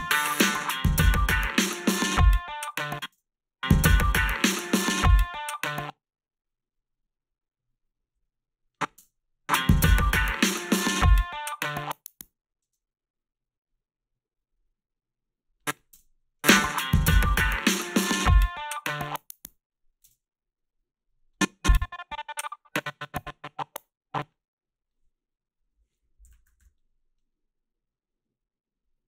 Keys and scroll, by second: 2.7 space, 3.1 space, 5.7 space, 9.0 space, 12.6 space, 15.9 space, 20.0 space, 26.3 f.